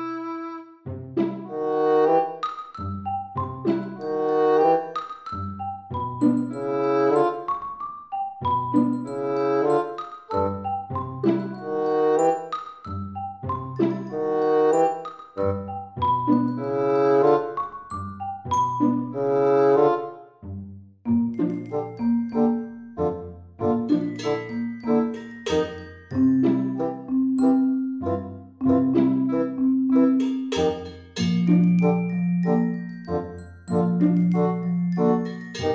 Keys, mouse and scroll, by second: 0.6 scroll up 5, 0.7 middle click, 3.8 click, 6.7 click, 15.0-15.4 scroll down 6, 15.9-17.3 scroll down 5, 17.6 s, 23.1 g, 26.8 Tab, 27.5 f, 30.5 s, 34.3 scroll up 1, 34.3 middle click, 35.3 e.